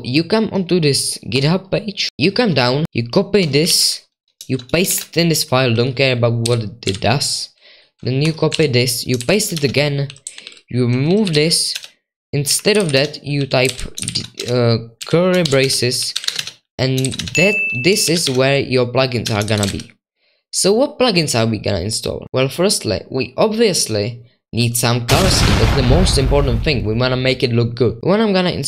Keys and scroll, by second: 3.7 super+2, 4.9 ctrl+v, 5.6-6.4 typing, 6.9 super+1, 8.5 super+2, 9.2 ctrl+v, 9.5 Escape, 10.5-19.6 typing, 13.6 Escape, 19.4 Escape, 22.2 super+4, 22.2 super+5, 22.2 super+2, 28.0 super+1.